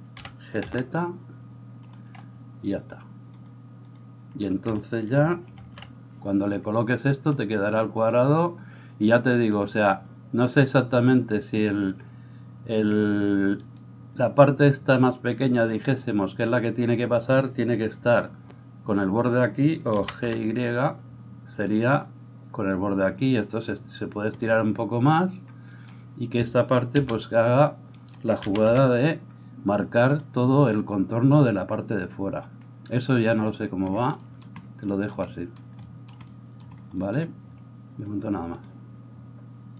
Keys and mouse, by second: 0.2 g, 2.1-3.5 middle drag, 3.5-27.0 drag, 5.6 alt+h, 20.0 g, 27.0-39.7 middle drag, 27.0 g, 28.4 g.